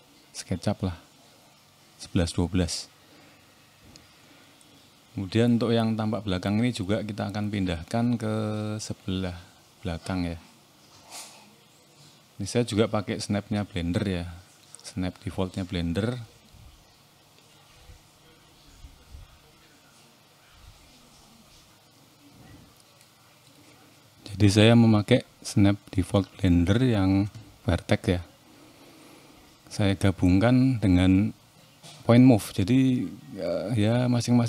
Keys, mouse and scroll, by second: 0.2 scroll down 1, 0.7 click, 1.1 middle click, 2.4 middle click, 3.4 r, 8.6 click, 9.7 middle click, 10.5 click, 12.5 shift+middle click, 13.0 middle click, 14.0 scroll up 2, 14.3 middle click, 15.1-15.5 scroll up 1, 15.8 shift+middle click, 16.8 click, 18.0 click, 22.6 middle click, 24.3 click, 27.1 shift+middle click, 27.4 scroll up 1, 27.6 middle click, 28.3 shift+middle click, 29.8 r, 33.6 middle click.